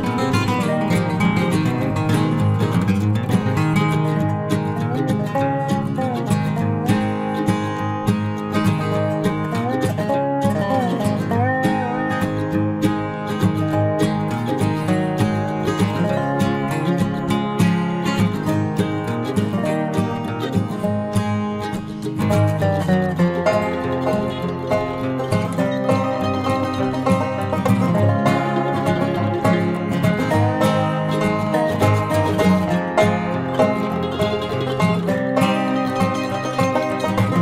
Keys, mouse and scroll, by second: 0.9 x, 1.1-2.9 right drag, 2.1 b, 2.7 g, 4.1-5.9 right drag, 4.3 b, 4.7 g, 7.6-10.3 right drag, 7.7 b, 8.0-9.7 drag, 8.5 b, 9.2 ctrl+z, 9.5 ctrl+z, 10.3-12.2 drag, 10.7 b, 11.4 g, 14.6 Tab, 15.0 z, 16.2 z, 17.0 Tab, 18.4 click, 20.2 b, 20.9 g, 21.2 click, 23.3-26.4 drag, 23.4 b, 23.8 g, 24.9 b, 25.5 g, 28.2 ctrl+s, 29.6 Tab, 30.5 ctrl+s, 34.6 Tab, 36.3-37.4 right drag.